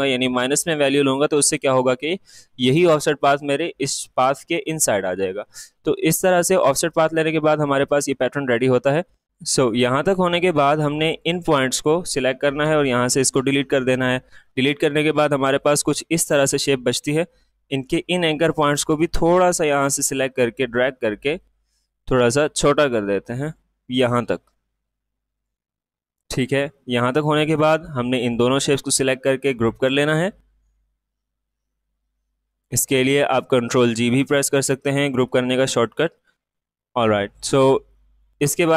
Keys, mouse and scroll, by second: 7.6-13.7 drag, 15.5-29.3 drag, 29.3 right click, 32.5 click, 36.2 click.